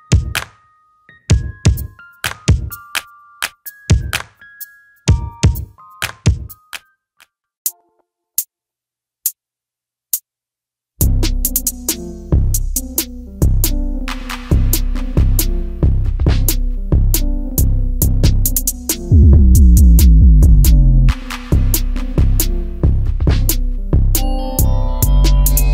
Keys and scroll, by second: 5.5 e, 7.2 space, 15.8 space, 20.3 ctrl+g, 23.2 m, 24.9 shift+space.